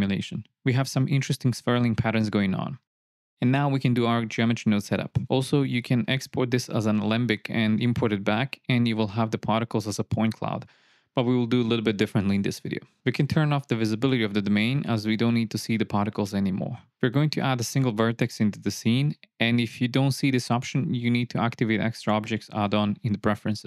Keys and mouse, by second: 0.5 KP_0, 1.0 click, 8.8-11.3 drag, 17.2 click, 18.0 shift+a.